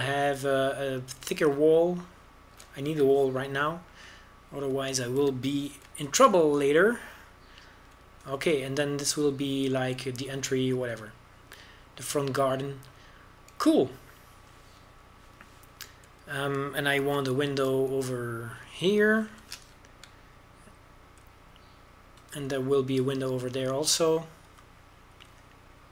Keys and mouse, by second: 0.6 ctrl+b, 6.5 a, 7.4 ctrl+r, 12.5 click, 17.8 a, 18.8 ctrl+r, 21.2 ctrl+b, 25.5 Tab.